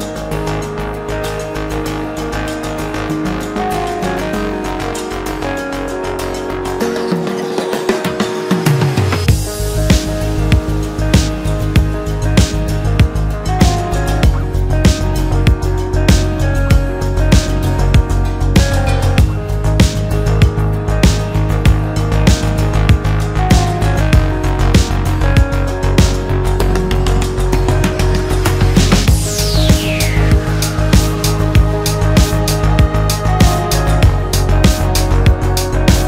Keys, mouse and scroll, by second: 0.3-1.6 scroll up 1, 2.0 click, 2.4 scroll up 1, 2.6-3.9 scroll down 1, 3.9 click, 4.3-5.0 scroll up 1, 5.0 click, 6.1 click, 9.8 click, 11.7-12.8 scroll down 5, 12.8-14.6 drag, 14.6 scroll up 2, 14.9-15.3 scroll down 1, 15.3-16.7 middle drag, 16.7 click, 17.2-19.0 drag, 19.1 scroll up 1, 19.3 Tab, 19.9 a, 20.0 3, 20.6 shift+n, 21.0 Tab, 21.8-22.9 drag, 22.9 scroll down 1, 23.1-24.0 middle drag, 24.0-24.3 scroll up 1, 24.3 click, 25.0-27.0 drag, 31.8 scroll down 1, 32.0 middle click, 32.5-32.9 scroll up 2, 32.9 click, 33.2 middle click, 34.0-35.3 drag, 35.3-36.0 scroll down 2.